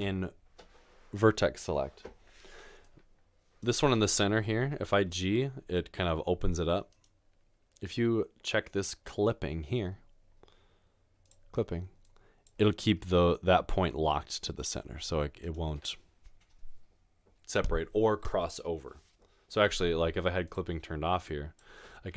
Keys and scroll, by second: 0.0 1, 5.0 g, 13.1 g.